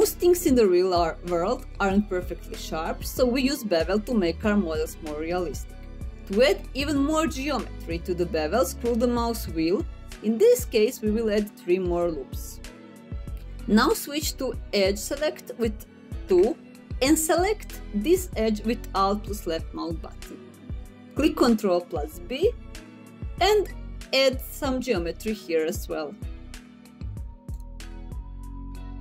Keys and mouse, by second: 18.5 2, 21.6 alt+click, 23.3 middle click, 24.6 ctrl+b.